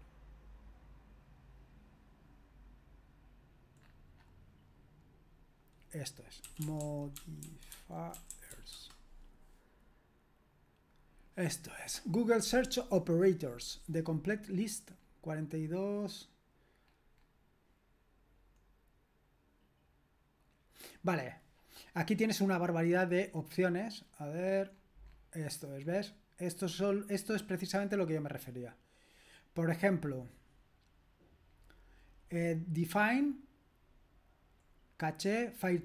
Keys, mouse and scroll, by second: 0.5-3.8 scroll up 1, 3.8-5.4 scroll up 1, 5.4-5.9 scroll up 1, 5.9 click, 6.2-9.0 typing, 17.3-18.8 scroll down 1, 18.8-23.1 scroll down 1, 23.1-26.7 scroll down 1, 26.7-29.2 scroll down 1, 29.2-31.4 scroll down 1, 31.4-33.9 scroll down 1, 33.9-34.7 scroll down 1, 34.7-35.8 scroll down 1.